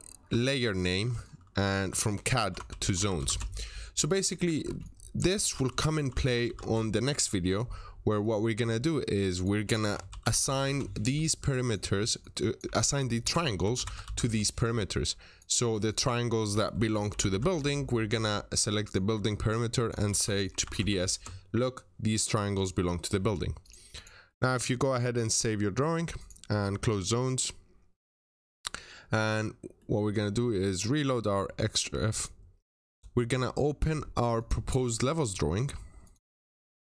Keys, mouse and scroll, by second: 0.5 click, 0.7 F2, 1.1 click, 2.2-3.2 typing, 4.1 click, 4.4 F2, 4.7 click, 5.0-6.5 typing, 8.1 click, 8.3 F2, 8.9 click, 9.5-10.5 typing, 11.5 click, 11.7 F2, 12.1 click, 12.7-14.1 typing, 15.3 click, 15.4 F2, 15.8 click, 16.4 click, 16.6-17.4 typing, 18.7 click, 18.7-21.0 typing, 19.0 F2, 19.4 click, 23.5 click, 23.8 double click, 24.2 middle click, 26.1 click, 29.5 middle click, 31.0 right click, 32.0 click, 32.7 middle click, 34.3 click.